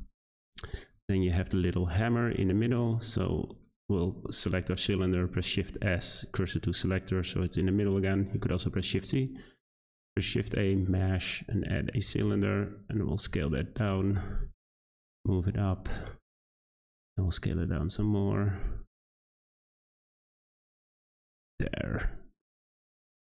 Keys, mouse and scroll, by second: 0.7-1.3 scroll up 3, 1.3-3.5 shift+middle drag, 3.5-3.9 scroll down 2, 3.9 click, 5.4 shift+s, 7.8 click, 9.9 shift+a, 12.0 Tab, 12.2 a, 12.3 s, 13.9 Tab, 14.1 g, 15.2 Tab, 15.4 a, 15.5 s, 20.1 Tab, 20.3-20.9 scroll up 5, 20.9 g.